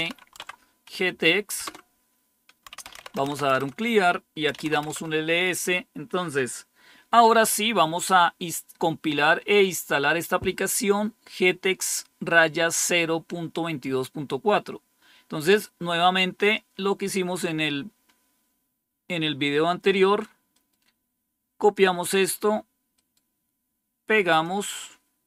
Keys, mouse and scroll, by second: 0.0-0.4 typing, 1.6 Return, 2.3-5.1 typing, 16.4-20.3 drag, 20.5-21.5 right drag, 21.5 click, 22.9 right click, 24.2-25.2 drag.